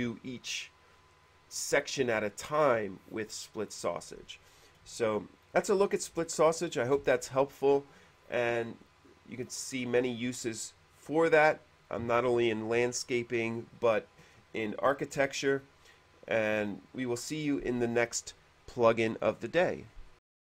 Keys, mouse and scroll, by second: 5.3 shift+middle click, 6.5 shift+middle click, 20.3 click.